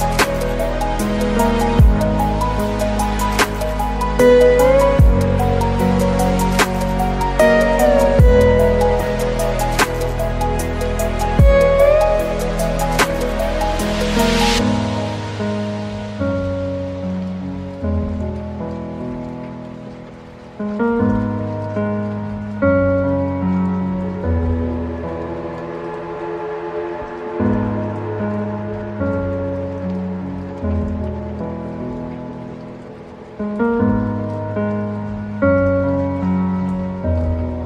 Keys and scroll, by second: 5.6 ctrl+alt+space, 6.9 ctrl+t, 7.2 ctrl+space, 17.5 ctrl+j, 18.0 ctrl+t, 27.1 ctrl+space, 27.8 ctrl+t, 29.7 ctrl+alt+space.